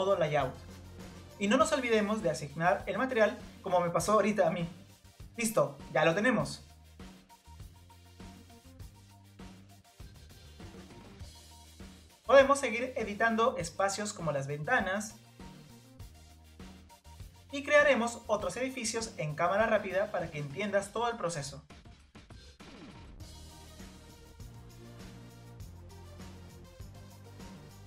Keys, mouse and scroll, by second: 1.1-1.6 scroll down 2, 1.6 middle click, 1.9 Tab, 2.9-3.9 drag, 4.1-5.6 scroll up 1, 5.6-7.5 middle drag, 7.5 click, 7.6 scroll down 3, 7.6 scroll up 1, 7.6 middle click, 8.0-8.5 scroll down 3, 8.3 middle click, 8.5-9.3 scroll up 5, 8.5 middle click, 8.8 click, 9.1 middle click, 9.3-10.0 scroll down 2, 9.4 middle click, 10.0 middle drag, 10.1 scroll up 1, 10.2 middle click, 10.4-11.0 scroll down 3, 10.8 middle click, 11.0-11.9 scroll up 2, 11.0 middle click, 12.5 click, 12.6 click, 12.7 scroll down 2, 12.8 middle click, 13.0 click, 13.5 scroll down 2, 13.6 middle click, 14.0 click, 14.5 scroll up 3, 14.5 middle click, 16.1 click, 16.9 click, 16.9 scroll up 1, 16.9 scroll down 3, 17.2 middle drag, 17.6 middle click, 17.8 click, 17.9-18.2 scroll up 4, 17.9 middle click, 18.2 Tab, 18.6 click, 18.7-19.1 scroll down 2, 18.8 click, 18.9 click, 19.1 middle click, 19.3 click, 19.3 scroll up 1, 19.4 middle click, 19.6-20.7 scroll down 3, 19.6 middle click, 20.7 Tab, 20.9-21.3 scroll up 5, 20.9 middle click, 21.0 Tab, 21.3 Tab, 22.5 Tab, 22.6 click, 23.0 click, 23.5 click, 24.7 Tab, 24.7 click, 25.3 g, 25.8 Tab, 26.1 scroll down 3, 26.1 middle click, 26.3 click, 27.6 middle click.